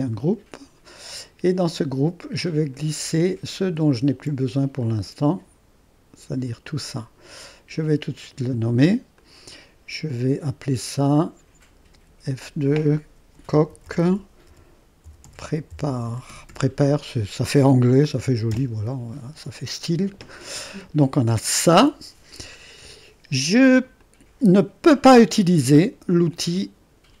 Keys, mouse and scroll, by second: 0.0-2.3 drag, 2.7-7.1 drag, 7.3 click, 8.4 click, 9.4-11.9 drag, 11.9 F2, 13.1-17.0 typing, 18.5 Return, 24.0-27.2 drag.